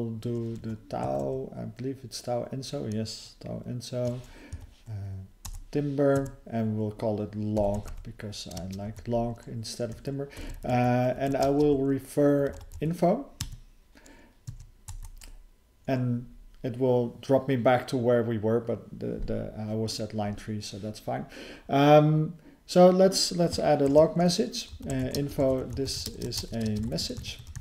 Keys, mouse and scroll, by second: 4.5 Down, 5.5 Return, 6.2 Tab, 10.3 BackSpace, 11.6 [, 13.5 Tab, 14.5 Tab, 23.9 (, 25.4 ".